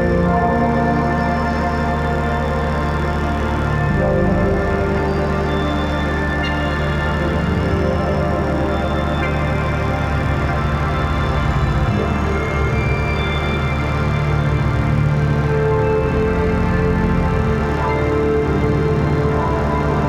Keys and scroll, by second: 0.7 ctrl+s, 9.1 [, 10.9 ], 11.1 [, 16.8 [, 17.6 ].